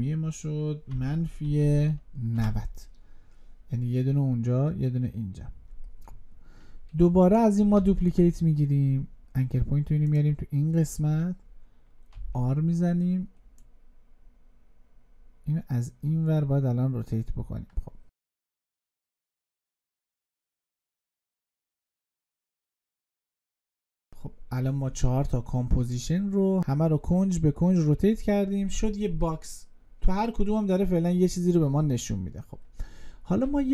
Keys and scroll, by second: 7.5 ctrl+d.